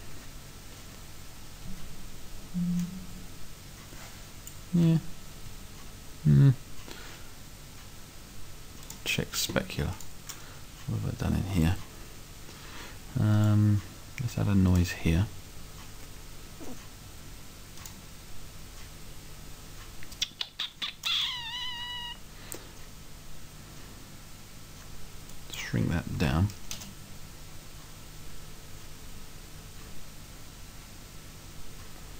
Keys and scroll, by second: 10.7 Right, 11.7 Right, 21.4 Right, 26.3 5, 26.8 Return.